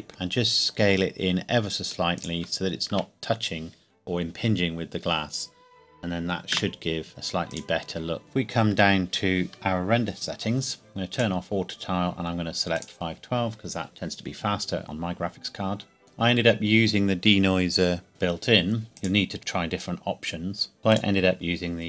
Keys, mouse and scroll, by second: 0.1 s, 2.1 shift+click, 2.6 scroll down 1, 2.9 Tab, 3.9-5.3 scroll down 1, 6.5 KP_0, 7.5 click, 9.5 alt+h, 10.8-11.1 scroll down 1, 11.1 click, 14.8-15.5 scroll up 1, 18.1 click, 18.9 click, 20.8 click.